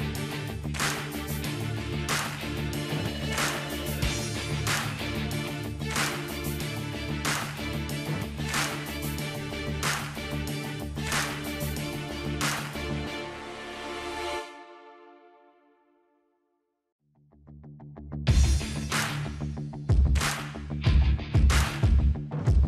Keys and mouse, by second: 4.6-6.1 drag, 4.6 z, 5.9 ctrl+s, 6.1 middle click, 6.8-8.8 drag, 8.4 alt+v, 9.4 click, 10.6 middle click, 11.1 click, 11.5 Tab, 11.7-15.0 drag, 11.7 right click, 12.4-13.4 middle drag, 14.3-15.5 middle drag, 15.2-17.0 drag, 16.7 middle click, 16.7 KP_0, 17.0 z, 18.1-20.6 middle drag, 19.2 z, 21.1-22.2 middle drag, 22.1 shift+d.